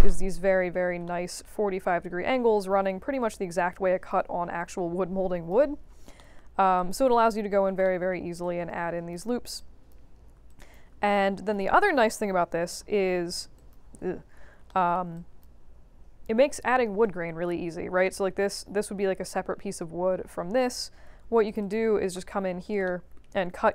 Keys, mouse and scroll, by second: 0.0 middle click, 0.5-1.0 scroll up 2, 1.0 middle click, 2.5-4.1 drag, 4.5 click, 6.1 alt+middle click, 6.7 alt+click, 7.8 alt+middle click, 8.4 click, 9.5 click, 10.4 alt+click, 10.9 q, 11.0 right click, 11.7 click, 13.0 middle click, 13.5 alt+click, 14.6 alt+middle click, 15.1 alt+drag, 17.0 right click, 17.7 middle click, 17.8 alt+middle click, 18.0 alt+middle click, 18.4-19.2 scroll down 2, 20.7-21.4 scroll up 2, 21.4 click, 21.6 click, 22.8 alt+middle click.